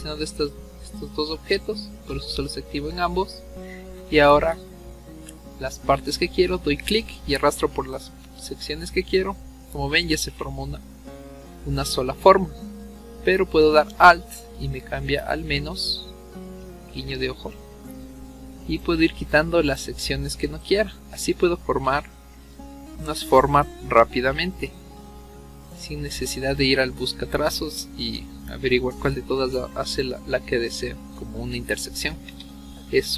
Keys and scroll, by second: 10.3 ctrl+z, 21.3 ctrl+z, 21.9 ctrl+z, 27.7 ctrl+z, 28.0 ctrl+z.